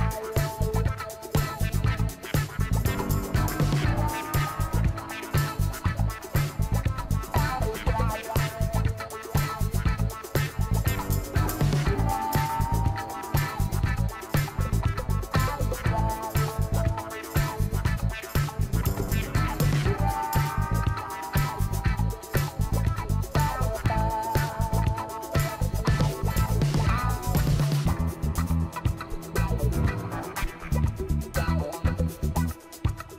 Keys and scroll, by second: 1.7 ctrl+alt+z, 8.5 ctrl+t.